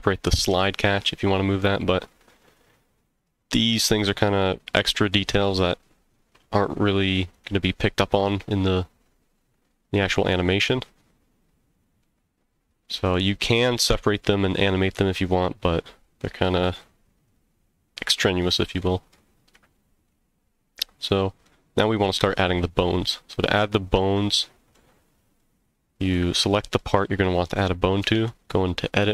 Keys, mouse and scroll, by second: 7.3 click, 12.0-13.1 middle drag, 15.0 scroll down 1, 15.4-18.0 middle drag, 18.4-19.1 middle drag, 19.7-20.1 shift+middle drag, 20.5-21.0 scroll down 1, 21.1-21.4 middle drag, 21.9 click, 22.6-24.0 middle drag, 24.3-24.7 shift+middle drag, 25.0-25.4 scroll up 1, 25.4-26.1 middle drag, 26.5 shift+scroll up 1, 26.5 shift+middle drag, 28.0 Tab, 28.6-29.1 middle drag.